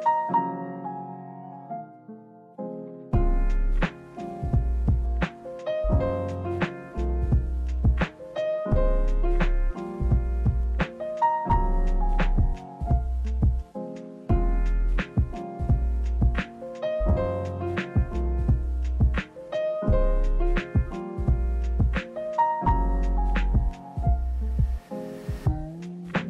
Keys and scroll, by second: 0.8 space, 1.9 space, 2.6 space, 4.9 space, 6.7 space, 7.3 space, 10.2 space, 15.6 space, 16.4 space, 17.7 space, 20.5 space, 22.7 space.